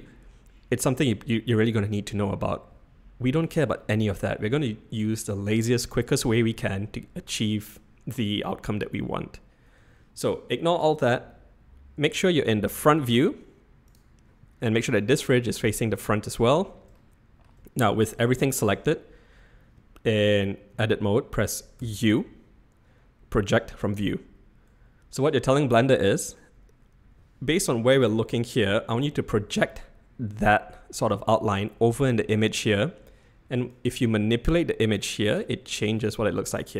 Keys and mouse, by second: 12.7 click, 17.1 shift+middle click, 21.8 u, 33.7-34.5 drag, 35.1-35.4 drag.